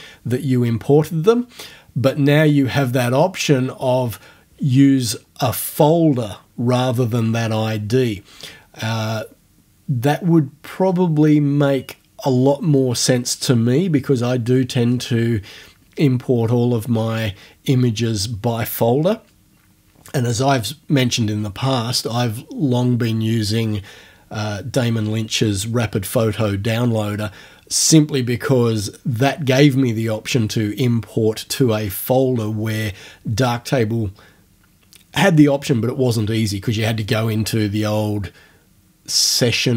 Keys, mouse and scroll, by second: 3.4-3.9 scroll down 2.